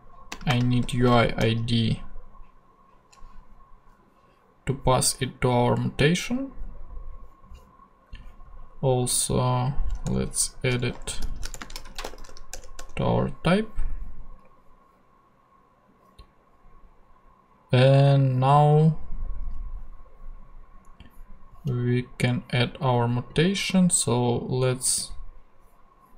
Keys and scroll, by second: 0.3-1.9 typing, 10.0 Return, 10.5-12.8 typing.